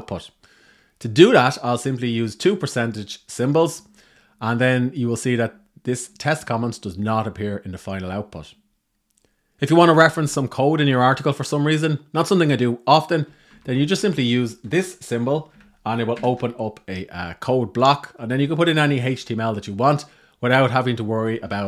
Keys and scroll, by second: 13.2 Right, 13.4 Right, 21.1 Up.